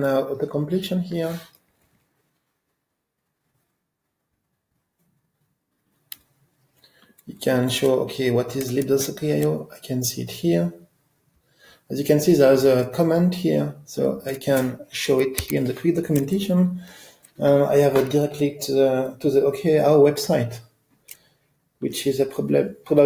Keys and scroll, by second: 9.0 ctrl+alt+space, 15.5 F1.